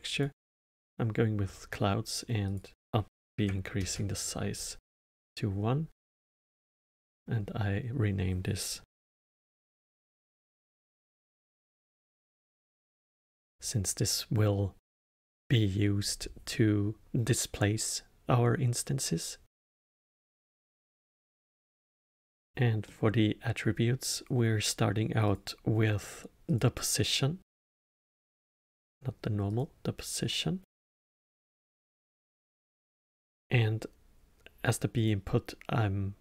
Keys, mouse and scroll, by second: 2.4-5.5 drag, 6.8-9.9 drag, 15.0-18.0 middle drag, 19.9-25.2 middle drag, 25.2-28.2 drag, 28.4-31.5 drag, 32.9-35.9 drag.